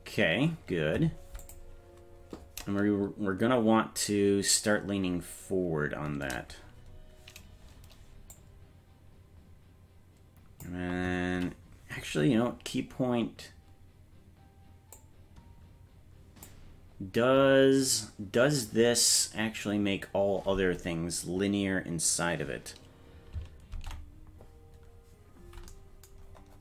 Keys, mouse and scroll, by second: 1.5 click, 1.5 scroll up 1, 8.3-10.7 drag, 15.0-16.5 drag, 23.7 ctrl+Tab.